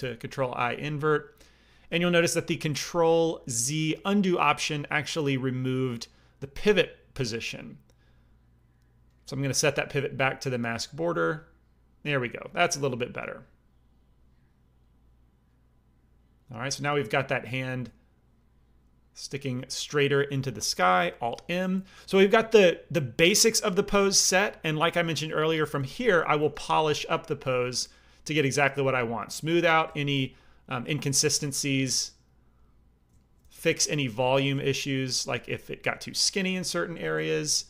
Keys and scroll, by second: 21.3 alt+m, 25.5-33.8 typing.